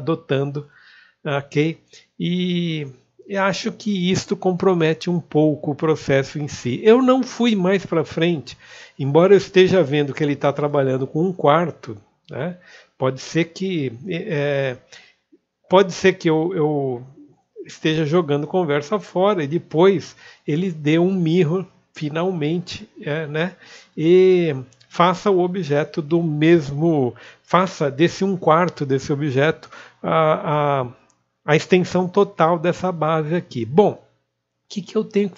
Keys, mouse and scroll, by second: 0.9-1.7 scroll down 1, 1.7 click, 7.6 alt+middle click, 10.8 scroll down 1, 11.5-12.5 scroll up 2, 12.5 click, 14.8 2, 16.1 ctrl+b, 16.7 alt+middle click, 17.4-17.9 scroll down 1, 18.1 ctrl+click, 20.6 middle click, 24.0 click.